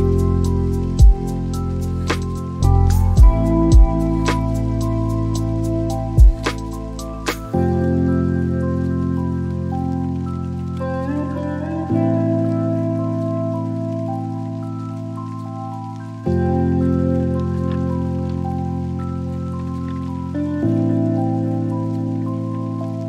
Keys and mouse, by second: 11.9 click, 14.3-17.1 drag, 20.1-21.8 drag.